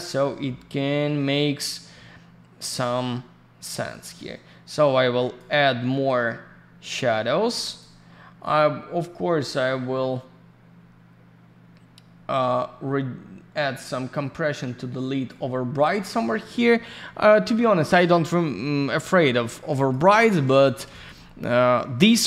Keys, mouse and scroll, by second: 3.8 click, 5.9 click, 8.4 click, 19.2 alt+middle click, 19.7 alt+r, 19.9 click, 20.0 middle click, 20.5 alt+middle click, 20.8 alt+r, 20.9 alt+click, 21.0 click, 21.1 middle click.